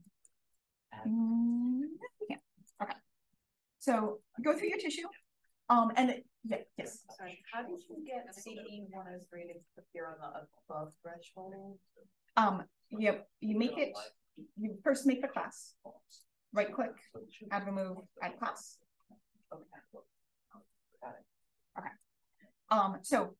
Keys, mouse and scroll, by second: 0.4 click, 2.3-2.8 drag, 3.1-3.7 scroll down 1, 3.7 click, 3.7-8.3 scroll down 1, 4.2 click, 4.9 d, 5.3 click, 8.3-10.8 scroll down 1, 10.8-13.6 drag, 20.6 click, 21.7 drag, 22.4 drag, 23.0 d.